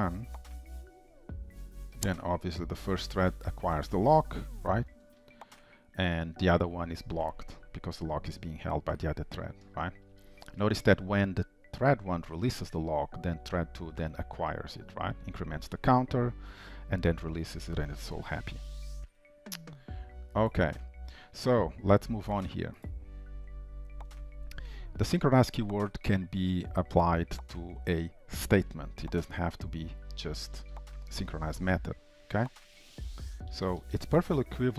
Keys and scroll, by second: 2.9 ctrl+shift+', 19.0 ctrl+shift+F12, 31.0 ctrl+c, 32.8 ctrl+v.